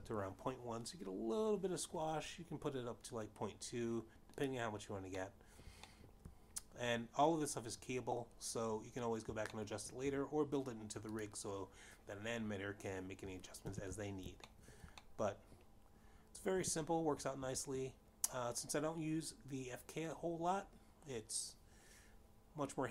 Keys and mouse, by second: 0.4 click, 2.1 ., 2.1 1, 2.1 Return, 2.5 Return, 7.0 click, 7.8 middle click, 8.6 shift+middle click, 12.3 shift+middle click, 13.6 click, 16.2 alt+g, 17.2 shift+middle click, 17.7 middle click, 19.3 g.